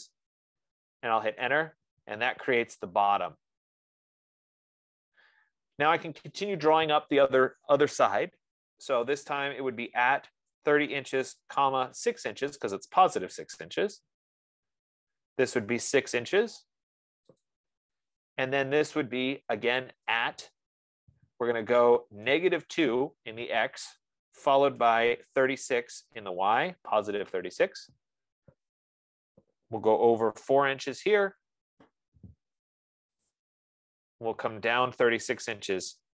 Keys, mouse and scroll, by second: 0.0-0.3 typing, 1.4 Return, 10.0-12.3 typing, 13.6 Return, 15.9-16.8 typing, 17.8 click, 20.2 @, 22.3-23.5 typing, 25.2-26.9 typing, 28.0 Return, 30.7 4, 31.3 shift+', 33.5 click, 35.3-36.1 typing.